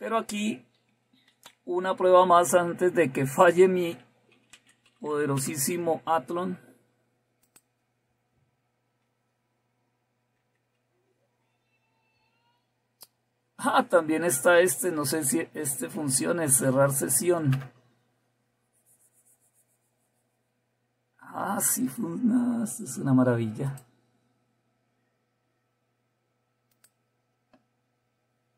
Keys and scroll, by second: 1.4 super+1, 3.0 typing, 4.5-6.2 typing, 10.9 super+x, 14.9 Down, 15.5 End, 15.6 Down, 16.0 Up, 16.1 Up.